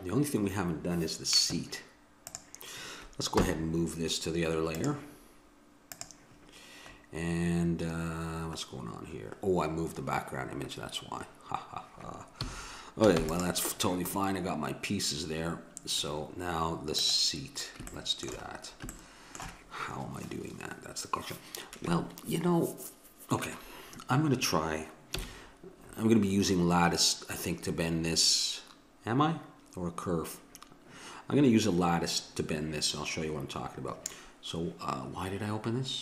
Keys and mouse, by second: 2.3-4.2 drag, 3.4 m, 5.9-7.7 drag, 12.4 a, 13.1 ctrl+s, 16.9-21.4 drag, 17.9 middle click, 25.1 n.